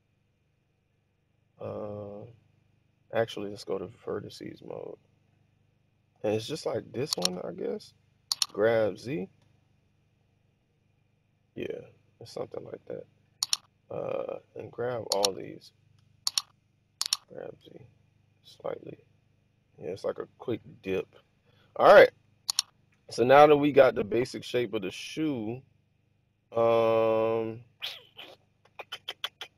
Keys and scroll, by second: 0.9 Escape, 7.1 1, 8.4 g, 9.0 z, 15.8 1, 17.1 g, 17.5 z.